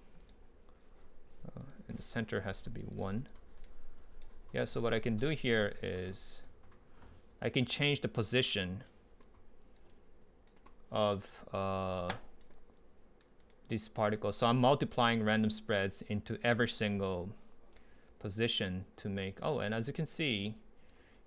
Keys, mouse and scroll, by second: 2.0 middle click, 2.3-3.6 drag, 3.6 right click, 13.2 middle drag, 15.2-17.6 drag, 17.9-20.6 right drag, 20.6-21.1 drag.